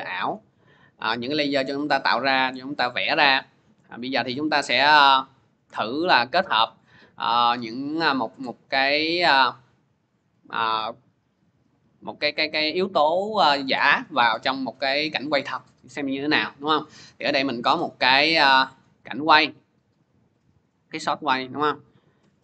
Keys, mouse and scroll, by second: 3.8 click, 4.7-9.8 drag, 16.8-17.8 drag, 17.8-20.4 scroll, 22.1 scroll down 1.